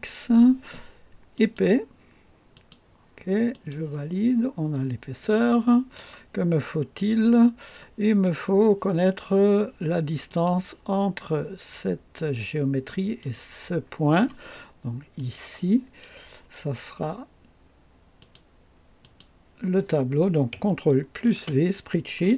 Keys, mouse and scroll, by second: 1.3 click, 2.5 click, 2.5 typing, 3.5 click, 5.2-6.1 drag, 6.7-7.0 scroll up 1, 6.7 typing, 7.8-8.4 right drag, 10.2 click, 12.8 click, 15.1 click, 18.2 click, 19.0 click, 21.3 ctrl+v.